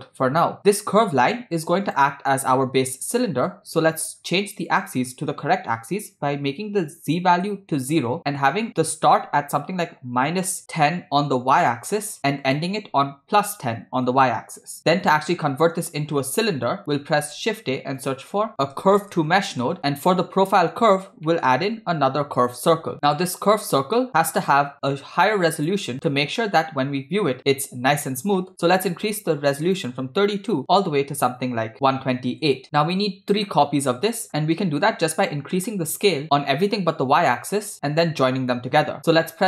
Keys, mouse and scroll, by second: 0.2 click, 1.5 click, 3.2 middle click, 4.7-7.4 drag, 8.2 middle click, 8.8-11.6 drag, 12.5-14.1 drag, 16.1-16.6 scroll down 2, 16.7 click, 17.4 shift+a, 21.3 middle click, 21.7 shift+a, 24.6-25.7 drag, 26.1-26.5 middle drag, 26.7-27.3 scroll up 3, 27.4-28.3 scroll down 1, 28.4 middle click, 28.5 scroll up 1, 28.7 scroll down 1, 29.7-32.5 drag, 33.1 scroll down 2, 33.4-34.3 middle drag, 38.5 middle click, 39.1 scroll down 1, 39.1 shift+a.